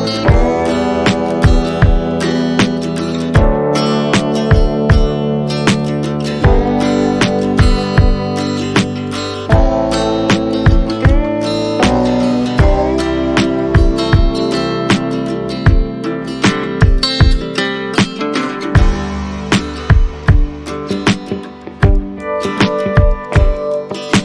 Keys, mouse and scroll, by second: 2.0 Tab, 3.8 Tab, 4.3 Tab, 4.9 Tab, 8.0 Tab, 11.0-11.6 scroll up 1, 12.1 shift+click, 12.4 shift+click, 14.6-14.9 scroll up 1, 16.1 scroll down 1, 16.4 alt+click, 17.6-18.3 alt+scroll up 1, 19.5 scroll down 1, 19.7 alt+click, 20.8 scroll down 1, 20.9 scroll up 1, 21.1-21.6 scroll down 1, 22.7 shift+click, 23.2 shift+click, 24.0 shift+click.